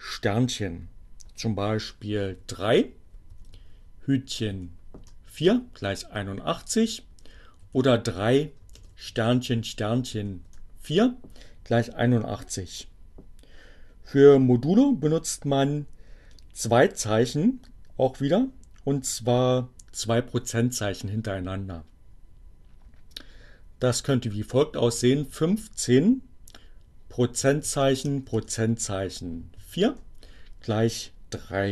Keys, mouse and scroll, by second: 1.0 3, 3.8 4, 3.9 Return, 6.2 3, 9.3 4, 10.4 Return, 24.0 1, 24.2 5, 26.7 shift+5, 29.4 4, 29.5 Return.